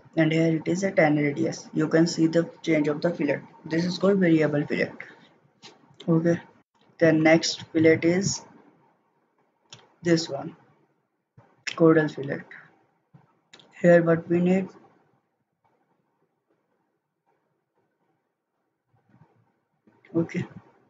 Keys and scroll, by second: 6.6 ctrl+z.